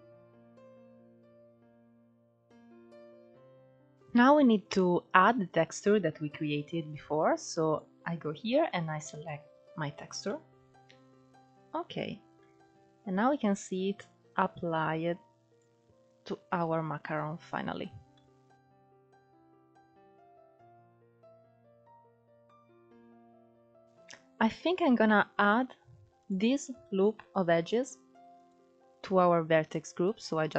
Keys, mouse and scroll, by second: 0.1-4.3 drag, 4.3-5.3 scroll up 1, 5.3-7.3 scroll up 1, 7.3-9.9 drag, 9.9-13.0 middle drag, 13.0-17.7 drag, 17.7 scroll down 5, 17.8-18.6 middle drag, 18.6-20.1 drag, 20.5 scroll down 4, 20.6-21.1 middle drag, 21.1 scroll up 2, 21.3 middle drag, 21.5 drag, 21.7 scroll up 3, 21.9-23.2 middle drag, 23.2 KP_1, 23.4 Tab, 23.8-25.1 scroll up 1, 25.1 click, 28.1-30.5 drag.